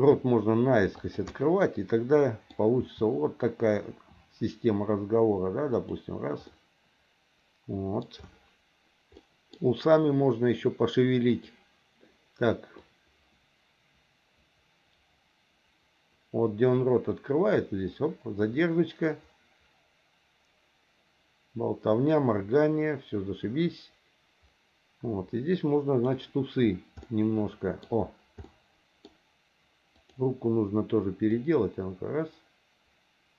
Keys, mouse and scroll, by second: 1.3-2.5 middle drag, 2.8 r, 6.5-8.0 middle drag, 9.2 middle click, 12.8-26.1 drag, 28.4 middle click, 30.0 click, 31.4-33.3 drag.